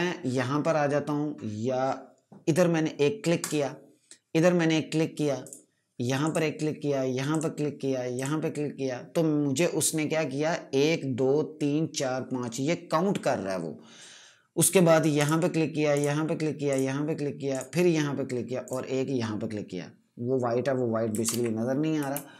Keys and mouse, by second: 3.3 click, 18.6 click, 21.1 ctrl+KP_Add, 22.0 space.